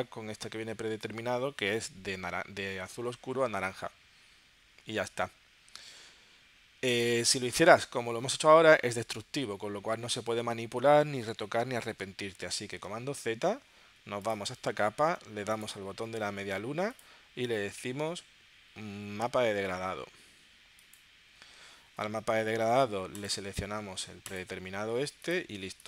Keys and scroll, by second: 12.8 super+z.